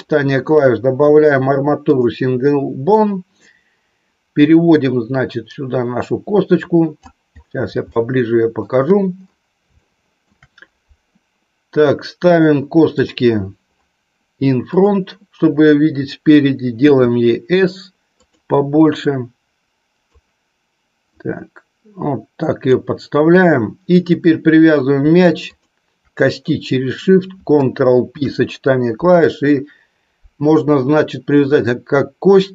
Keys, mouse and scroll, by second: 3.4-6.9 drag, 7.8 shift+middle click, 9.8 shift+middle click, 12.9-18.3 drag, 18.9-20.1 drag, 21.1-22.7 drag, 24.1-32.5 drag.